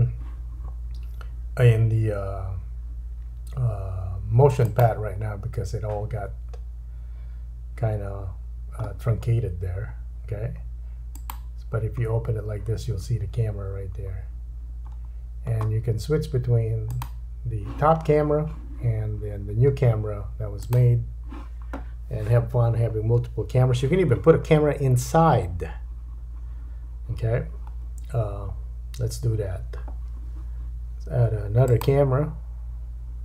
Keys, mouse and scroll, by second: 4.7-15.0 drag, 8.3-9.3 scroll down 3, 9.3-11.1 scroll up 1, 11.1 right click, 12.0-12.3 scroll down 3, 14.8-15.2 scroll up 4, 16.8 click, 16.8 middle click, 16.8 right click, 18.1 scroll up 1, 19.4-19.9 scroll down 2, 20.6 click, 20.6 middle click, 20.6 right click, 23.6-31.6 drag.